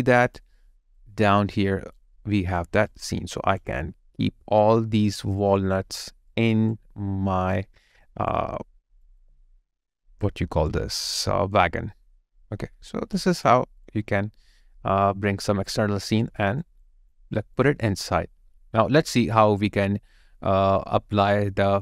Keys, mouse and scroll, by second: 2.2 alt+right click, 2.9 alt+click, 4.5 alt+click, 6.1 alt+click, 6.3 alt+right click, 9.1 alt+click, 13.7 alt+click, 16.4 alt+right click, 16.8 alt+click, 17.3 alt+right click.